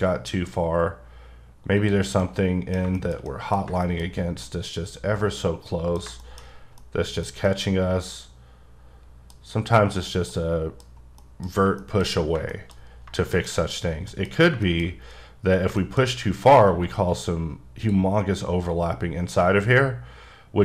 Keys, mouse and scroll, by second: 2.2 middle click, 4.0-4.4 scroll up 2, 4.4-6.0 middle drag, 6.4 scroll up 1, 6.8 middle click, 7.5 middle click, 9.5-10.0 scroll up 1, 10.0-10.3 scroll down 1, 10.3 middle click, 10.8-11.2 scroll down 1, 11.2 middle click, 11.5 scroll down 2, 11.8 shift+middle click, 12.5 shift+double middle click, 12.9 scroll up 2, 13.1 shift+middle click, 13.7-14.1 scroll up 1, 14.1 middle click, 14.3-14.6 scroll up 3, 14.6 shift+middle click, 15.7 shift+scroll up 2, 15.8 shift+middle click, 16.6 q, 17.1 click.